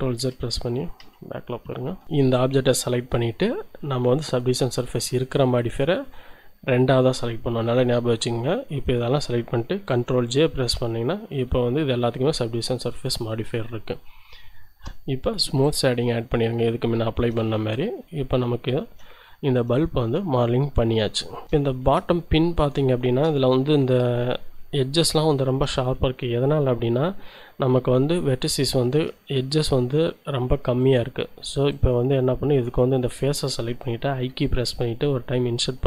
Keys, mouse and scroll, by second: 2.0 middle click, 2.7-3.1 scroll up 2, 4.3 middle click, 5.2 right click, 7.6-9.6 shift+right drag, 10.5 ctrl+j, 12.4 shift+right click, 15.6 click, 16.7-17.8 shift+drag, 17.8 middle click, 18.6 shift+middle click, 19.2-19.7 shift+scroll up 1, 19.8 shift+middle click, 20.5-21.1 shift+scroll up 1, 21.3 shift+middle click, 21.8 shift+Tab, 22.9 shift+click, 23.4 shift+scroll up 2, 25.5 Tab, 26.5-26.9 scroll up 2, 26.9 click, 27.3-27.7 scroll up 2, 27.7 click, 28.9 ctrl+Tab, 30.8 click, 31.7-33.9 middle drag, 34.2 i.